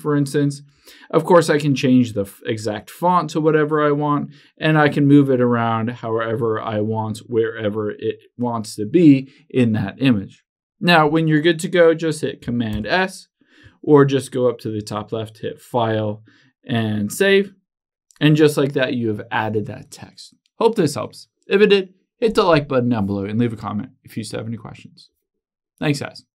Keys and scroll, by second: 13.0 super+s.